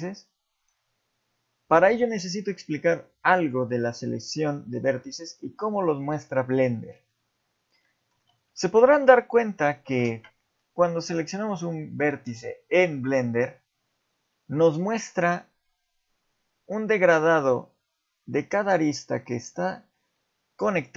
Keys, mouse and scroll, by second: 0.6 click, 3.4 click, 4.1 middle click, 5.2-5.8 scroll up 1, 6.3 shift+middle click, 7.8 middle click, 8.2 z, 8.7 shift+middle click, 9.6 scroll up 1, 11.4 click, 12.1 click, 13.1 click.